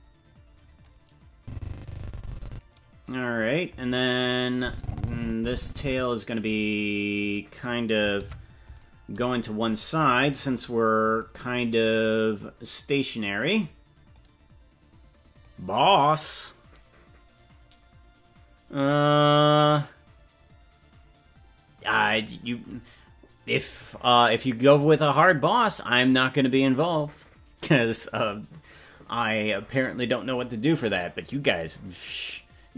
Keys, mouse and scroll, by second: 4.5-6.1 drag, 8.2 alt+r, 9.2-10.5 scroll down 7, 12.3-13.4 drag, 14.1-15.5 drag.